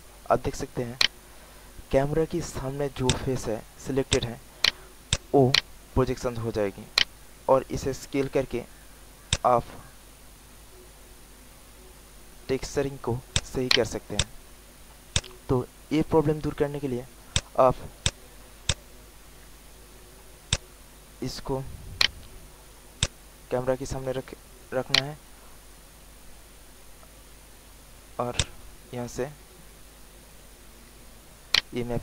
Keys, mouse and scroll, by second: 0.4 alt+middle click, 1.0 alt+right click, 1.7 alt+middle click, 3.0 click, 3.6 alt+middle click, 4.0 alt+click, 4.6 alt+right click, 5.6 alt+right click, 6.4 alt+middle click, 6.9 alt+right click, 9.2-12.7 drag, 13.2 alt+click, 13.7 alt+right click, 14.1 alt+click, 14.7 alt+middle click, 15.1 alt+click, 15.5 alt+right click, 17.2 click, 17.9 shift+click, 18.6 shift+click, 19.5 alt+middle click, 20.4 alt+click, 21.2 alt+middle click, 21.9 alt+right click, 22.5 alt+middle click, 22.9 alt+click, 23.7 alt+middle click, 24.2 alt+click, 24.9 alt+right click, 28.3-29.9 drag, 31.1 alt+middle click, 31.5 alt+right click.